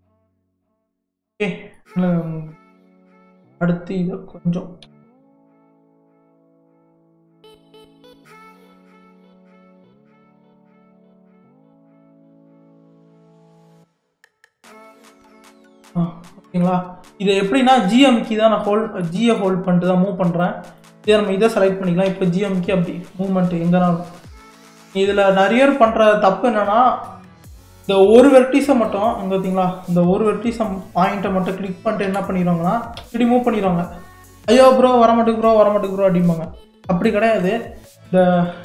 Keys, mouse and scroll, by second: 0.8 click, 1.3 shift+middle click, 2.0-3.2 scroll down 2, 3.2 click, 3.8-4.8 scroll up 2, 4.8 g, 15.0 click, 15.4-16.0 scroll down 2, 16.0 shift+middle click, 16.7-17.4 scroll down 1, 17.4-18.4 shift+middle drag, 18.4 scroll up 1, 19.0-20.4 shift+middle drag, 20.4 click, 22.1 g, 27.7 click, 29.1-30.8 middle drag, 30.8 click, 32.1 KP_3, 33.0 g, 37.1-38.6 middle drag.